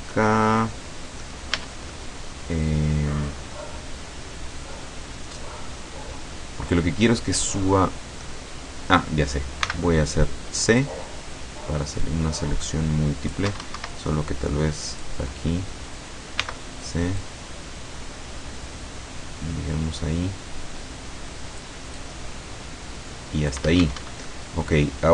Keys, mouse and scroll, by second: 0.2-1.5 middle drag, 1.6 a, 2.0 click, 2.2 scroll up 1, 9.7 c, 10.9-13.6 drag, 13.6 Escape, 15.0 click, 16.5 c, 17.3-21.9 drag, 22.0-23.8 drag, 23.8 Escape, 24.3-25.1 middle drag.